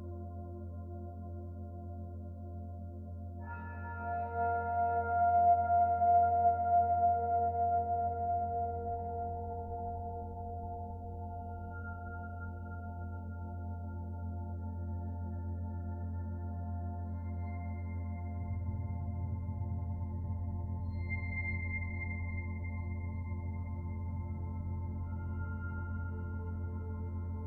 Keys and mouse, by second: 8.9-11.0 middle drag, 24.9-26.5 middle drag, 27.1-27.4 middle drag.